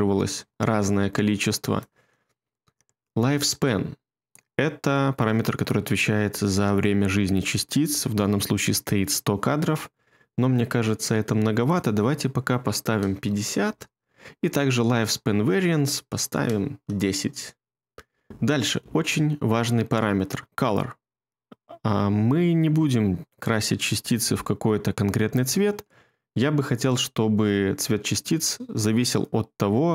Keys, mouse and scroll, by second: 12.8 typing, 13.7 Return, 16.0-16.7 typing.